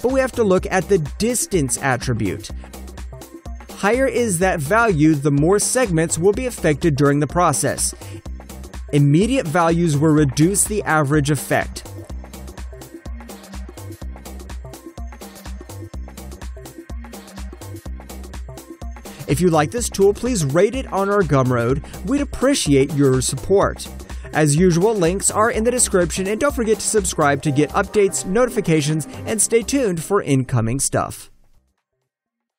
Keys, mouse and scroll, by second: 5.2 double click, 6.2 alt+click, 16.1 alt+click, 16.8 alt+right click, 17.3 alt+click, 17.8 alt+right click.